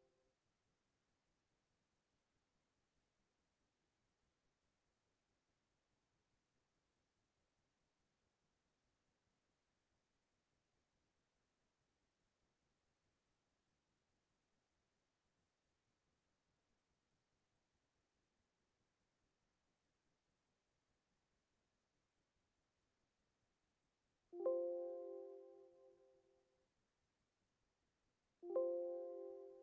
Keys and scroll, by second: 0.2 ctrl+KP_8, 10.4-11.2 typing, 12.8 Return, 25.1 Left, 25.4 Left, 25.6 Left, 29.1 Up.